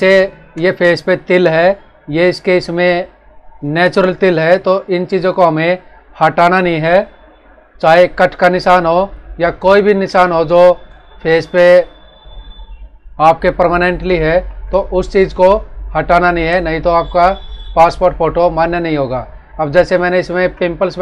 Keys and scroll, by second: 7.8 space, 14.2 ctrl+-, 15.2 space, 20.0 ctrl+=.